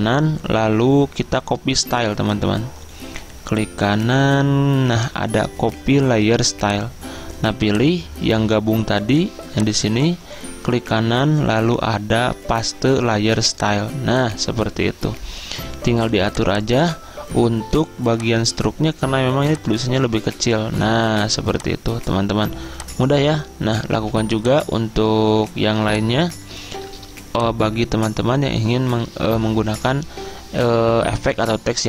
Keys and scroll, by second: 24.0 z.